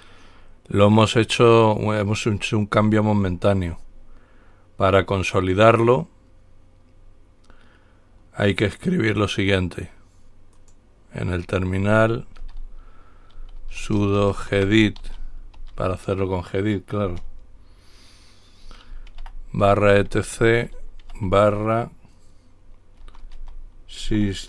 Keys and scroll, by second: 12.6-16.3 typing, 19.3-21.2 typing, 23.0-24.2 typing.